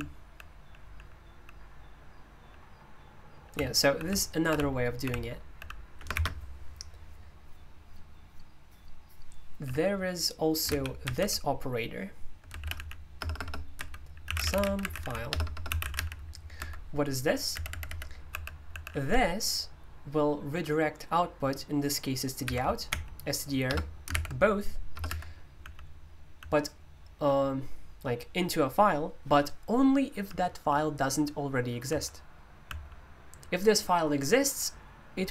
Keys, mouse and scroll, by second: 0.0-0.6 h, 0.8 h, 1.2 h, 2.3 h, 3.5-6.1 typing, 12.6-19.2 typing, 16.6 Escape, 22.5 i, 25.1 Escape, 25.6-27.1 typing, 30.2-30.6 typing, 31.8-32.6 typing.